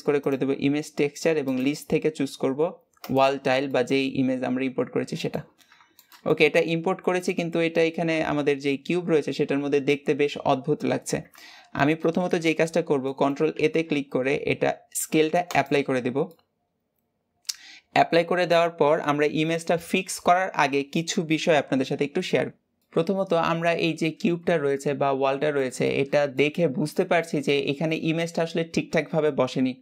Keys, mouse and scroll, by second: 1.3-3.5 drag, 3.5-5.4 middle drag, 5.4 scroll up 2, 5.8-9.2 shift+middle drag, 12.9 middle click, 13.4 ctrl+a, 16.2-26.8 middle drag, 26.8 scroll up 1, 27.0-29.8 middle drag.